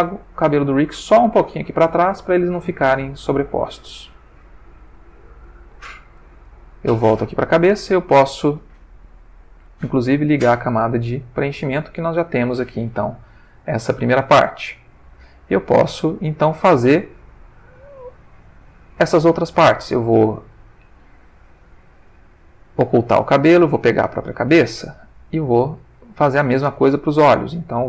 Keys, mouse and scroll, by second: 1.4 shift+middle click, 2.0 middle click, 2.3-3.9 middle drag, 4.9 click, 5.6 ctrl+middle click, 7.1 click, 10.4 click, 11.4 ctrl+middle click, 15.5-17.2 drag, 17.3-19.1 drag, 20.2 click, 22.9 click, 23.8 click, 25.4 click, 26.0 click.